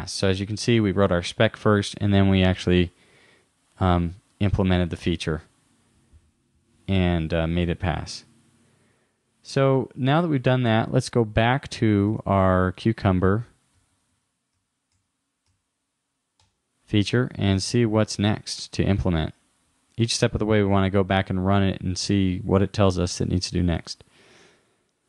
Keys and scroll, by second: 12.1 super+Tab.